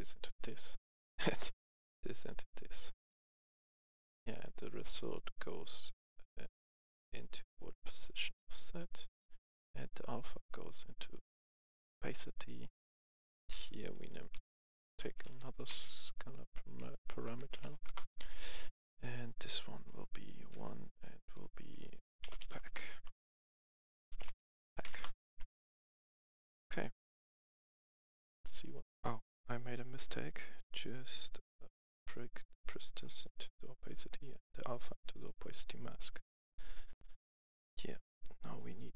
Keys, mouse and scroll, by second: 3.4 right click, 4.4 click, 5.6-8.6 drag, 8.9 right click, 9.8 right click, 9.9-13.6 drag, 14.2-15.6 typing, 16.7 r, 17.2 BackSpace, 17.3 a, 17.5 r, 17.7 Return, 18.6 click, 19.8 click, 20.6 1, 21.1 click, 22.2-22.7 typing, 22.9 Return, 24.5-24.8 typing, 25.1 Return, 26.0 click, 27.9-28.5 scroll down 1, 28.5 click, 28.8 F10, 31.6 click, 32.7-35.9 drag, 36.0 right click.